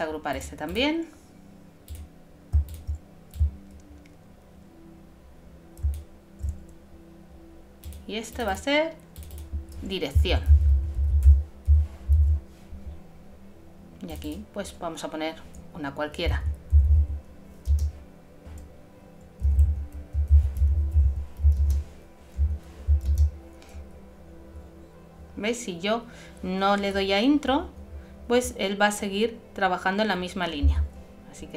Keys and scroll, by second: 10.1-11.0 typing.